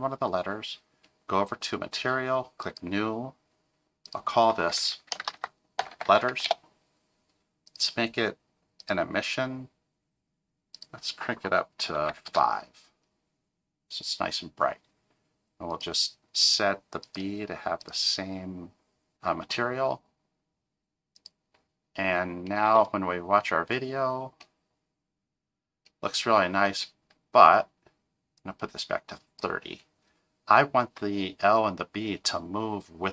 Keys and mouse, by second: 2.6 click, 4.0-7.2 drag, 5.9 t, 7.8-8.9 drag, 10.7-13.0 drag, 15.7 click, 17.0 click, 22.6 space, 26.6 space, 28.4-29.4 drag.